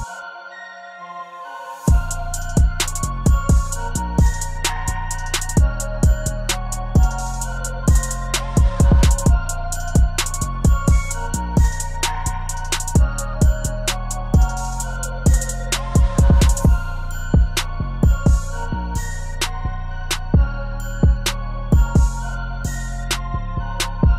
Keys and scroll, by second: 17.6 ctrl+d, 19.3 ctrl+0.